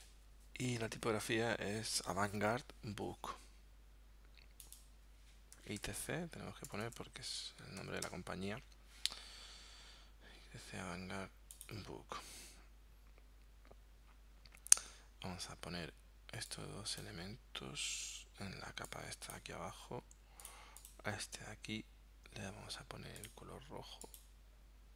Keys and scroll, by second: 5.6 |, 5.8 r, 6.0 c, 6.7 BackSpace, 7.8 t, 8.1 c.